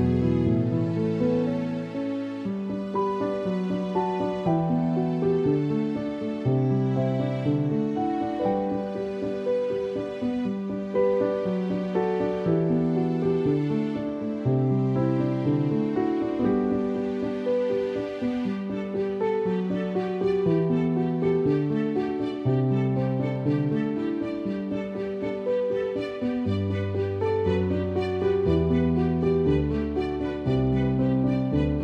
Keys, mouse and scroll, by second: 0.0-0.6 typing, 1.6 ctrl+z, 3.0 click, 5.5-6.7 typing, 5.7 click, 13.4 ctrl+-, 14.1 ctrl+shift+f, 14.9 click, 16.7 ctrl+e, 18.2-18.9 typing, 18.4 click, 20.0 click, 22.0-22.8 typing, 23.2 ctrl+shift+f, 23.9 click, 24.6 space, 24.8 click, 24.9 space, 26.1 ctrl+j, 26.7 click, 27.3 alt+t, 27.9 click, 29.2 ctrl+=, 31.5 click.